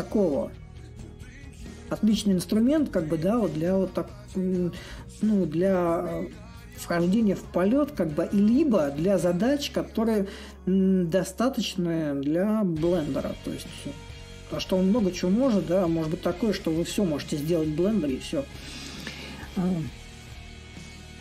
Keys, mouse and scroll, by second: 2.6-7.7 drag, 8.6-13.7 drag, 16.2-21.2 drag.